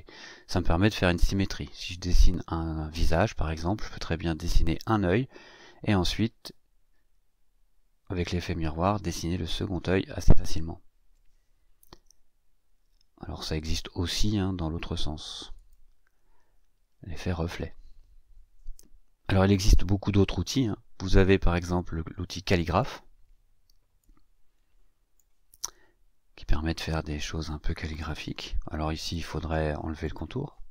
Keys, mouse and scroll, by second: 15.5 click, 22.7 click, 24.0-25.3 drag, 27.2 click, 29.0 click, 30.0 click.